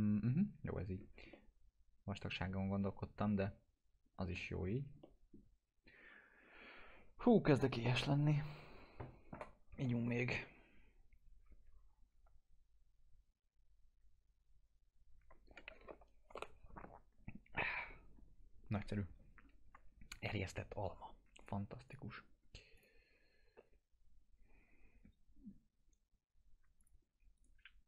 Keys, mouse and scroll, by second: 0.4 scroll up 1, 1.2 scroll down 1, 1.3-4.4 alt+middle drag, 4.6-4.9 scroll up 1, 5.0 alt+middle click, 21.4 click, 26.7 click, 27.3 right click.